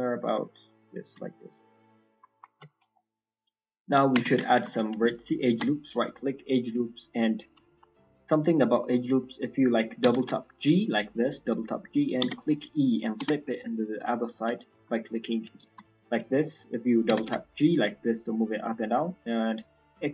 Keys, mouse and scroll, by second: 0.3 click, 3.6-4.1 scroll down 2, 4.1 Tab, 4.4 shift+middle click, 4.7 middle click, 5.5 ctrl+r, 7.9 middle click, 8.1-8.5 scroll up 3, 9.2 middle click, 9.5-10.0 scroll up 1, 10.0 g, 14.5 shift+middle click, 16.4 middle click.